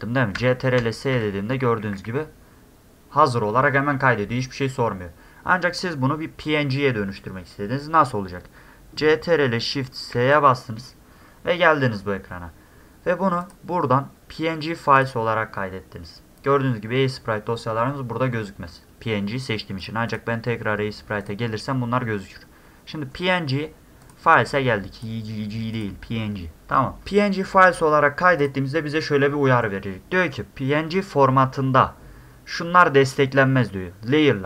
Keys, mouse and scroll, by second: 0.4 ctrl+s, 0.8 ctrl+s, 1.1 ctrl+s, 1.3 ctrl+s, 1.5 ctrl+s, 1.7 ctrl+s, 1.9 ctrl+s, 10.1 ctrl+shift+s, 13.4 click, 15.0 click, 19.8 click, 20.1 click, 21.2 click, 24.0 click, 25.0 click, 25.7 click, 28.4 click.